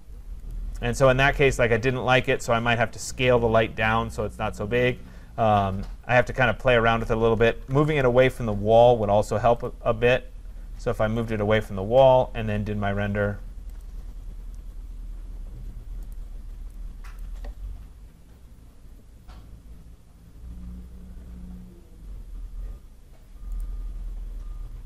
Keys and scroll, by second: 7.8 Return.